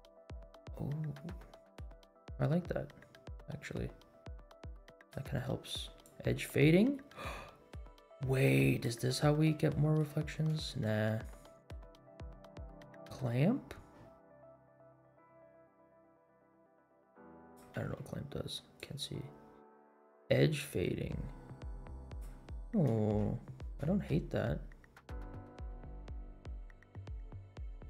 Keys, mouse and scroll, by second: 6.0-8.9 drag, 9.2 scroll down 2, 9.7-10.0 shift+middle drag, 10.3 scroll up 2, 10.6 shift+middle click, 12.9-18.0 drag, 18.3 ctrl+z, 18.8-22.3 drag, 22.5 scroll down 2, 23.5 scroll up 2, 25.4-27.8 drag.